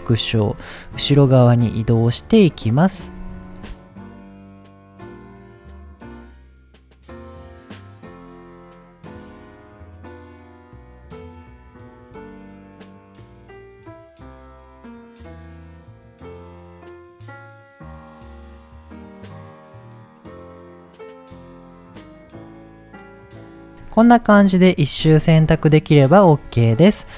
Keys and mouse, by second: 0.2 middle click, 2.1 click, 2.6 middle click, 3.5 click, 4.2 e, 4.4 click, 4.4 z, 4.5 s, 4.7 click, 5.2 g, 5.2 click, 6.5-7.8 typing, 7.2 middle click, 7.5 click, 8.2 click, 8.7 middle click, 9.1 shift+click, 9.5 middle click, 9.7 e, 10.1 z, 10.1 s, 10.3 click, 11.1 click, 11.3 click, 11.4 middle click, 12.1 shift+click, 12.5 middle click, 12.7 e, 13.1 click, 13.7 s, 13.8 click, 14.3 click, 14.3 g, 16.1 shift+click, 16.3-17.6 typing, 16.5 click, 16.8 click, 16.9 middle click, 17.3 middle click, 17.9 click, 18.0 middle click, 18.7 shift+click, 19.3 middle click, 19.5 e, 19.8 click, 20.4 middle click, 20.4 s, 20.6 g, 20.9 click, 21.3 click, 21.9 e, 22.1 click, 22.5 click, 22.5 s, 22.7 g, 23.0 click, 23.1 middle click, 23.3 middle click, 23.6 middle click, 25.3 middle click, 25.9 middle click.